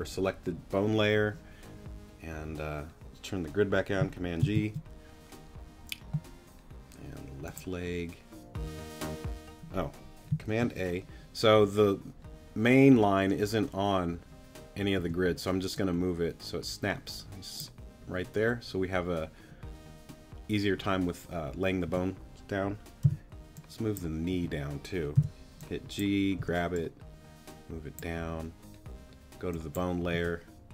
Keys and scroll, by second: 4.4 super+g, 10.5 super+a, 15.0 t, 21.9 t, 23.0 g, 24.3 t, 25.1 g, 26.4 t, 30.1 a.